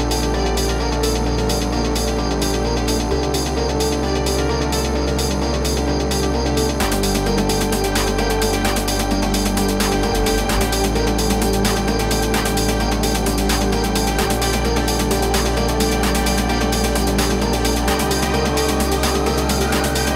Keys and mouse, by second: 1.6 typing, 3.1-3.9 typing, 7.6 -, 8.1 KP_0, 8.4 -, 9.3 click, 10.8 click, 11.7 click, 12.5 click, 13.9 click, 15.5-15.9 typing, 16.9 z.